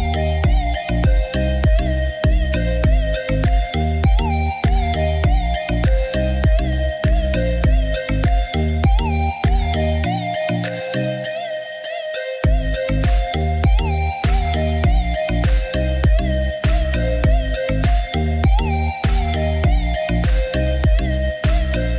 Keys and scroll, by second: 0.0-0.8 typing, 12.0 Escape.